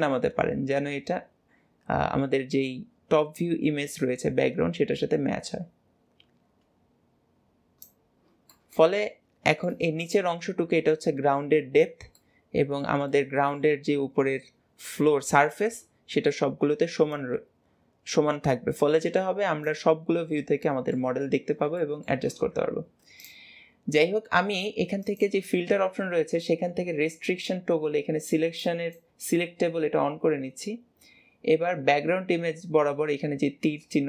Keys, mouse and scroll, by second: 8.0 scroll down 1, 8.4-15.8 middle drag, 15.8-17.0 scroll up 1, 17.0 click, 19.9-20.3 scroll down 3, 20.3-21.1 middle drag, 21.1 scroll down 5, 21.6-23.1 shift+middle drag, 23.1 click, 24.9-28.1 drag.